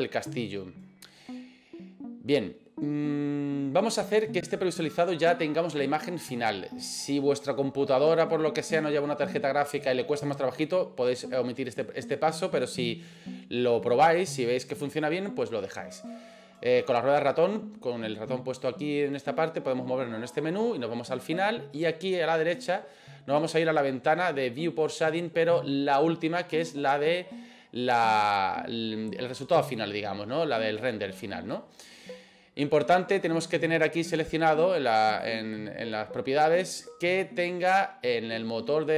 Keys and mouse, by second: 27.2 click, 35.1 click.